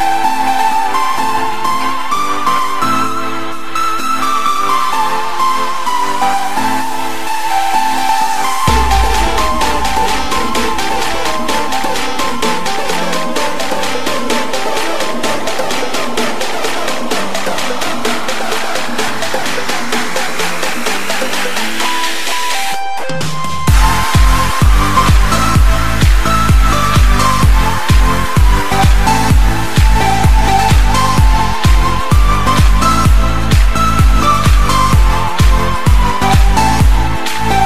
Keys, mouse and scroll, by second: 20.2-22.7 drag, 23.0-23.4 scroll down 4, 24.0 click, 25.2-26.3 drag, 26.3 KP_1, 27.0 scroll up 1, 27.7-31.3 drag, 31.6-32.0 scroll down 3, 32.0-32.9 middle drag, 32.9 click, 33.4 scroll down 1, 33.6-35.3 middle drag, 35.3 KP_7, 37.2-37.6 drag.